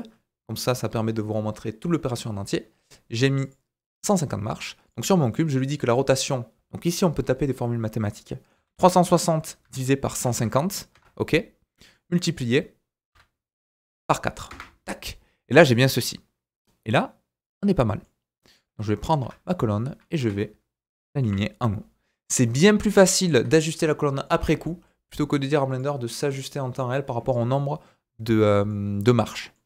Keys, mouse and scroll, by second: 3.2 drag, 3.5-4.9 drag, 4.8-19.2 right drag, 4.8 middle click, 5.8-18.5 drag, 5.8-18.5 middle drag, 19.2 Tab, 20.2 KP_1, 21.2 g, 23.7 Tab, 24.1 middle click, 24.4 z, 24.8 middle click, 25.7 click, 26.2 click, 27.3 click, 27.3 middle click, 27.3-29.6 right drag, 27.9-28.5 scroll up 3, 28.7 middle click.